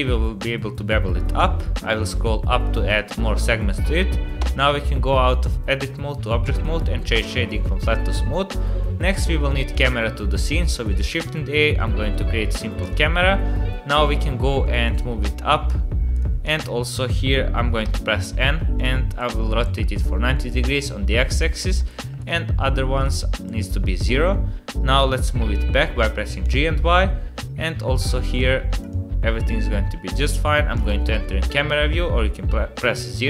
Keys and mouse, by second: 4.4 Tab, 6.5 click, 8.8-9.7 middle drag, 10.2 shift+a, 14.6 drag, 15.1 g, 16.4 KP_7, 17.8 n, 18.9-19.9 drag, 21.7 click, 23.0 click, 25.0 g, 28.3 click, 30.7 click.